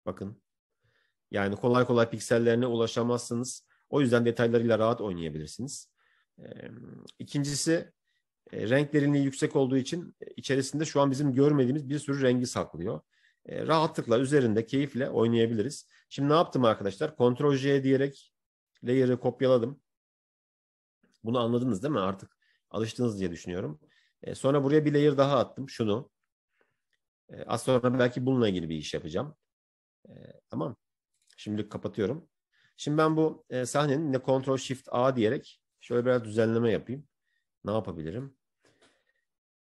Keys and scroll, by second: 14.2 ctrl+shift+a, 19.5 Escape, 34.2 ctrl+shift+a.